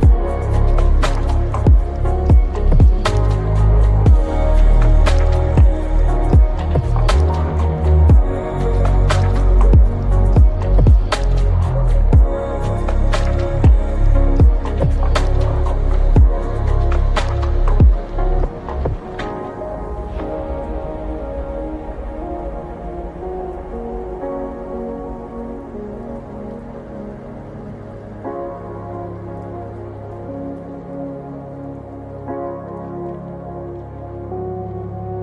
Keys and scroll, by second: 2.5 shift+x, 2.9 Return, 4.1 ctrl+s, 14.7 0, 14.9 Return, 23.0-24.7 typing, 25.7 ctrl+s, 34.1 ctrl+s.